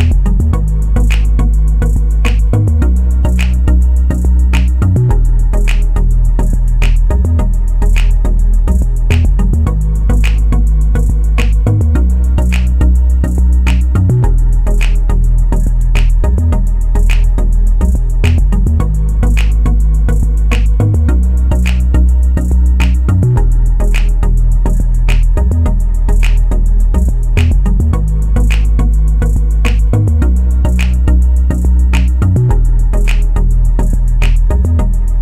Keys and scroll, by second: 3.7-4.9 typing, 5.0 Return, 16.8-17.7 typing, 17.8 Return, 25.9-26.8 typing, 33.2-34.1 typing.